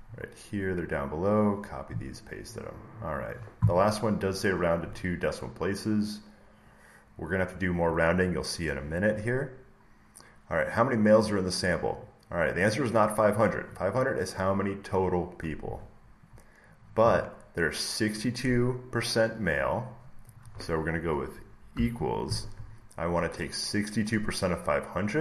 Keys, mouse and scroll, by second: 0.0-0.9 scroll, 0.9 scroll, 4.7 click, 8.2 click, 9.5-10.2 scroll, 11.9 click, 12.9 click, 16.2 scroll, 18.1 click.